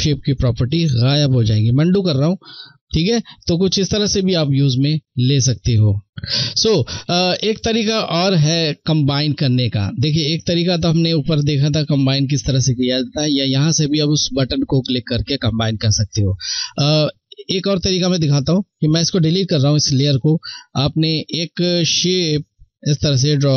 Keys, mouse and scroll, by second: 0.8 ctrl+z, 3.5 ctrl+z, 4.1 ctrl+z, 17.1 click, 17.2 click.